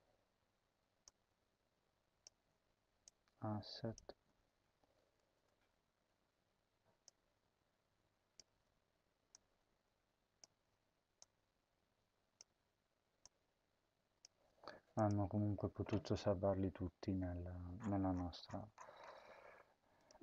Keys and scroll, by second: 5.3 BackSpace, 8.4 ctrl+v, 10.4 ctrl+v, 14.2 ctrl+v, 15.2 ctrl+s.